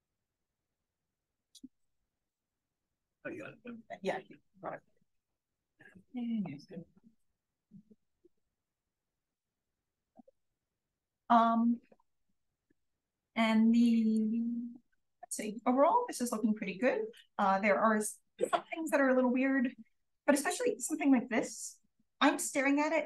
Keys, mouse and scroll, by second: 8.5-10.3 scroll up 1, 10.3 click, 10.3-11.8 scroll up 1, 11.8-12.5 scroll up 1, 12.1 click, 12.5 scroll down 1, 12.8-13.5 scroll up 1, 13.7-14.1 scroll up 1, 13.7 click, 14.4-14.7 drag, 15.0 drag, 15.8 drag, 16.4 click, 17.1 click, 17.9 d, 18.5 d, 18.6-19.7 scroll up 1, 19.7-23.0 scroll up 1, 19.7 d.